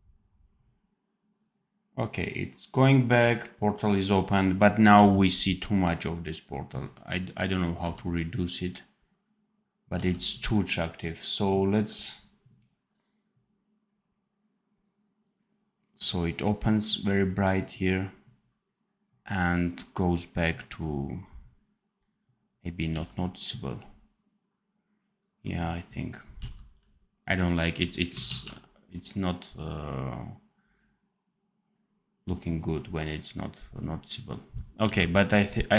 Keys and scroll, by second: 4.9 d, 7.7 d, 22.8 d, 26.3 d, 28.2 ctrl+s, 34.8 d.